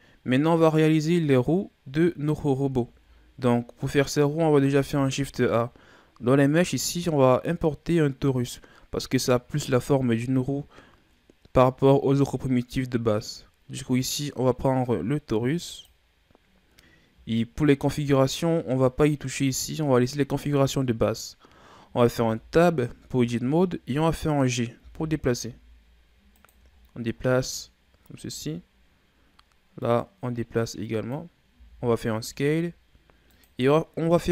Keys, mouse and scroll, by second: 1.8-2.4 scroll down 1, 2.4-3.1 shift+scroll up 4, 3.1-4.7 ctrl+scroll down 2, 4.7 shift+a, 22.1 Tab, 23.4-24.4 shift+scroll up 2, 24.8 g, 26.7-27.6 shift+scroll down 9, 27.6-28.9 scroll up 8, 28.9-29.8 scroll up 2, 29.8 click, 31.5 s.